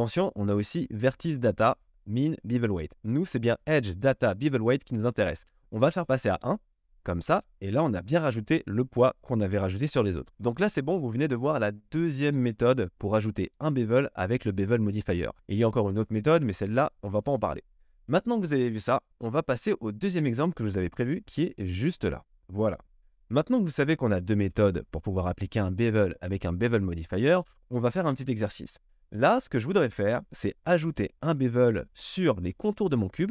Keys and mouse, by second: 10.6-21.0 drag, 21.0 middle click, 21.8 click, 22.0-23.0 middle drag, 23.0-25.7 drag, 23.6 KP_1, 25.7-29.0 middle drag, 29.0 click, 29.1-33.3 middle drag.